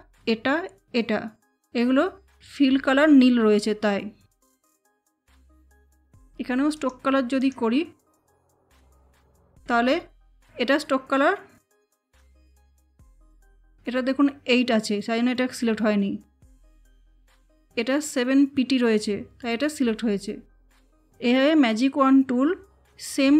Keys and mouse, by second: 6.6 click, 12.2 click, 16.5 click.